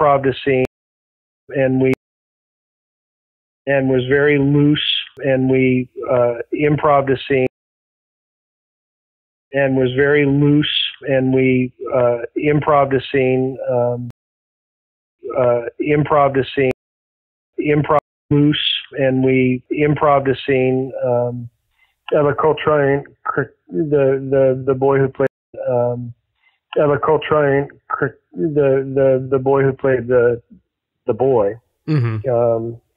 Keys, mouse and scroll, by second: 0.5 space, 1.1 ctrl+shift+Delete, 1.4 space, 1.8 space, 2.4 click, 3.0 Delete, 3.4 click, 3.6 space, 5.6 click, 6.3 click, 6.8 click, 7.3 space, 7.7-9.0 drag, 9.3 click, 9.4 space, 11.5-12.9 drag, 13.2 click, 14.0 space, 14.9 click, 15.1 space, 15.5-16.7 drag, 16.6 space, 17.3 ctrl+shift+Delete, 17.4 space, 17.9 space, 18.1 click, 18.2 space, 20.6 click, 21.3-22.6 drag, 23.0 click, 25.2 space, 25.3 click, 25.4 space, 32.4-32.9 drag.